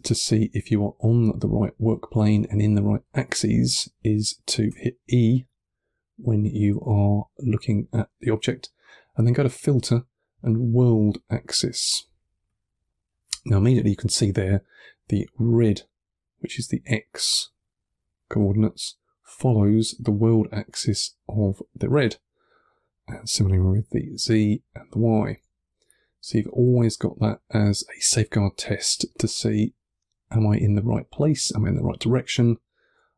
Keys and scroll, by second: 2.1 2, 3.2 1, 4.6 e, 5.2 1, 6.6 3, 12.1 1, 25.7 2, 27.8 1.